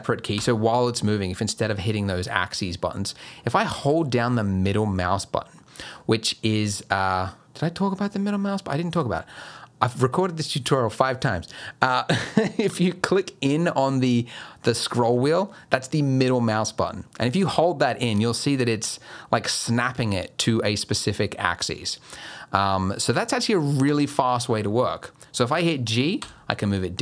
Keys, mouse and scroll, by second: 0.3 g, 26.2 g.